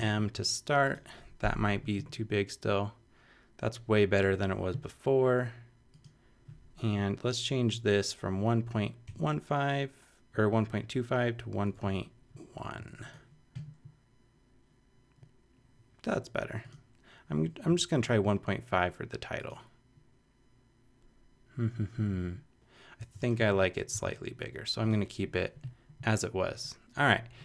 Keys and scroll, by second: 0.0 super+5, 0.1 super+s, 7.5 Right, 8.1-9.0 typing, 10.3 Right, 11.7 BackSpace, 12.6 super+s, 17.7 BackSpace, 23.4 super+z, 23.9 super+s.